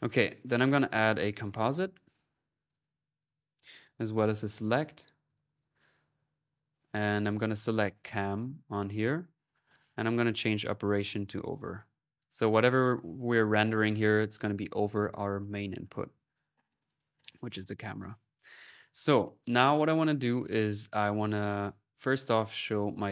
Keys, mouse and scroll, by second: 0.4 right click, 0.4-2.0 typing, 0.8 click, 3.1-4.4 drag, 4.1-4.9 typing, 5.1 click, 5.8 click, 6.6 middle click, 6.9 click, 7.7 click, 8.5 middle click, 8.7-9.9 drag, 10.1 click, 11.1 click, 11.9 click, 15.0-16.1 middle drag, 16.5-17.7 drag, 18.7-20.7 drag, 21.5 right click, 21.8-23.1 drag, 22.2 middle click.